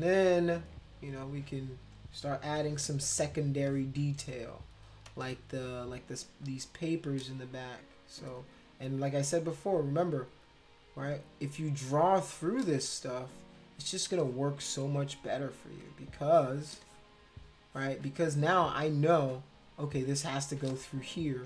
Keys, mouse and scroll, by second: 2.6 [, 3.2 space, 3.7 click, 5.1 space, 5.2 click, 6.4 click, 8.2 space, 8.3 click, 9.5 click, 10.4 shift+click, 12.2 shift+click, 12.6 space, 12.8 click, 14.2 space, 14.2 click, 15.7 click, 16.7 space, 16.8-18.3 drag, 19.8 click, 20.7 click, 20.7 space.